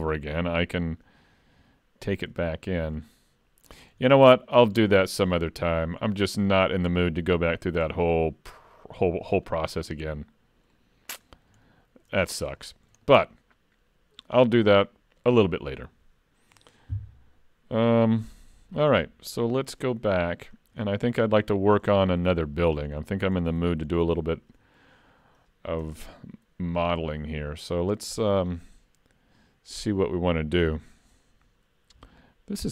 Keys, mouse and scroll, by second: 19.7 click, 20.2-20.8 scroll down 8, 20.9 shift+middle click, 21.4 middle click, 22.0 shift+middle click, 22.6 middle click, 23.3 shift+scroll up 1, 23.6 alt+a, 23.9 scroll up 3, 24.2 shift+middle click, 25.8-26.6 scroll down 4, 26.8 click.